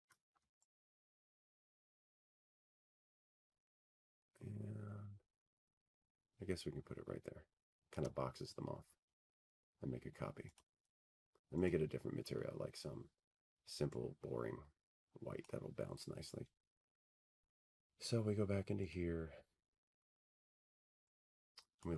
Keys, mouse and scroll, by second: 0.7-1.4 scroll, 1.4-2.4 scroll, 2.4-3.0 scroll, 4.7 click, 13.5 shift+click, 14.0-15.8 scroll, 16.2 click, 17.2 click, 17.8-18.3 scroll, 20.9 click.